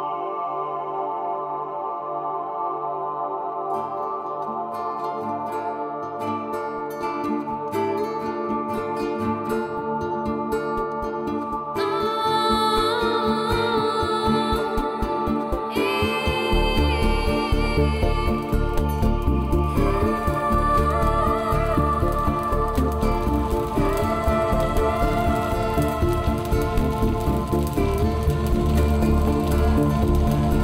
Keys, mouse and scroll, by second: 0.3 click, 4.0 Escape, 7.2 click, 8.8 Tab, 9.0 middle click, 10.2 Tab, 10.5 scroll up 3, 10.7 shift+middle click, 11.5 click, 14.2 click, 16.7 middle click, 18.4 Tab, 18.8-19.5 scroll up 5, 19.0 shift+middle click, 19.7 middle click, 20.0 scroll up 1, 20.5 shift+middle click, 20.8 middle click, 21.2 shift+middle click, 21.4 scroll up 1, 21.9 click, 22.3 g, 23.2 right click, 23.4 click, 23.5 g, 24.4 right click, 24.9 click, 25.0 g, 26.4 click, 26.5 g, 27.5 right click, 27.9 click, 27.9 g, 28.9 right click, 29.0 scroll down 4, 29.2 middle click, 30.2 click.